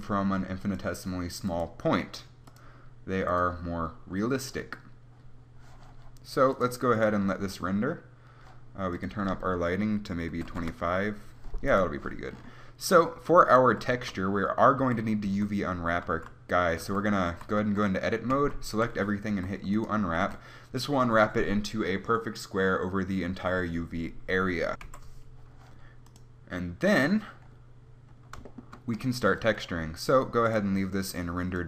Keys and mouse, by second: 1.1-6.0 drag, 6.5-8.5 drag, 8.5-11.4 middle drag, 11.7-14.2 right drag, 13.2 click, 14.2 Tab, 16.1 z, 19.3 u, 20.2 Tab, 30.6-31.6 drag.